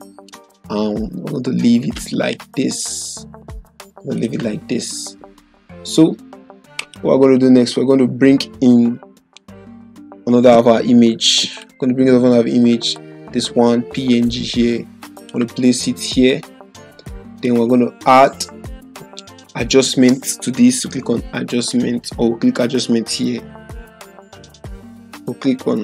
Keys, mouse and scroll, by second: 4.1 click, 6.7 click, 11.5 click, 11.6-15.4 drag.